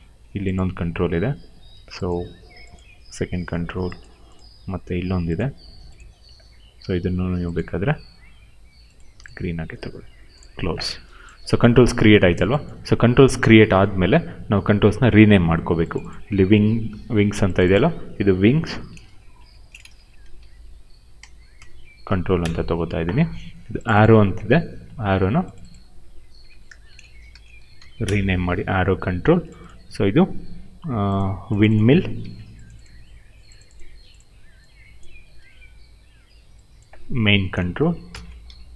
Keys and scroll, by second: 16.8 ctrl+c, 18.4 ctrl+v, 18.8-22.0 typing, 22.3 Return, 24.8 ctrl+c, 26.4 ctrl+v, 26.6-28.2 typing, 31.9 ctrl+c, 35.3 ctrl+v, 37.8-38.7 typing.